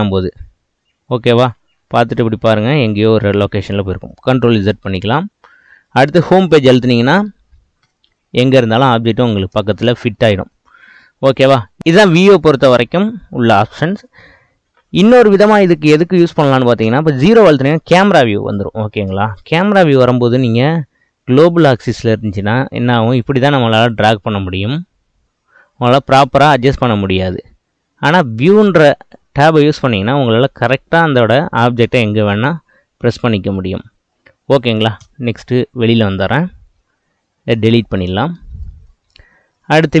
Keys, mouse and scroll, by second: 1.9-4.3 middle drag, 4.3 ctrl+z, 7.9 Home, 9.8-11.8 shift+middle drag, 16.8 KP_0, 21.4-23.3 drag, 24.6 click, 28.4-30.3 drag, 35.1 KP_0, 36.3-37.6 shift+middle drag, 37.6 x, 38.7-40.0 shift+middle drag.